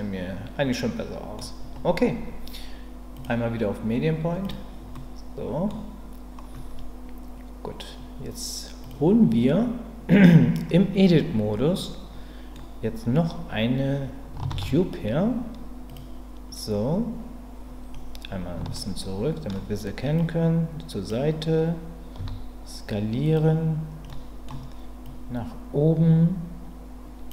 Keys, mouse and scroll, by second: 3.2-4.5 drag, 8.8 click, 11.8 middle click, 14.5 shift+a, 18.7 shift+middle click, 20.2 click, 22.2 s, 23.2 click, 24.1-25.1 middle drag, 25.1-27.3 drag.